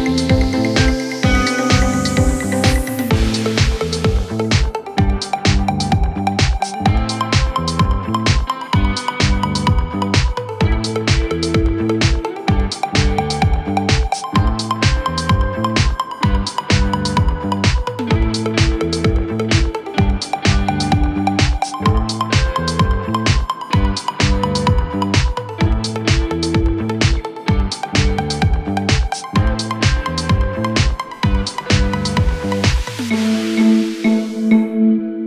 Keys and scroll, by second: 19.6 ctrl+alt+Right.